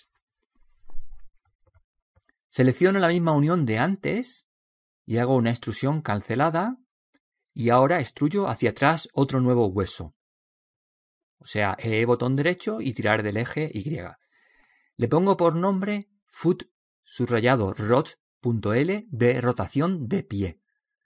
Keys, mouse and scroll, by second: 3.8 right click, 6.2 e, 8.3 click, 10.8 click, 11.8 right click, 15.5 click, 17.4 BackSpace, 18.7 o.